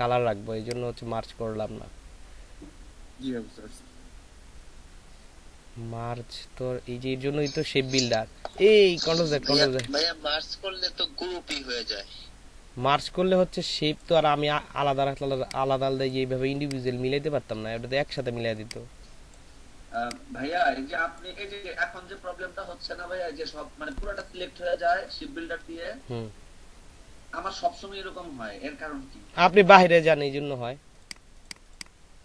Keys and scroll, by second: 9.8 ctrl+z.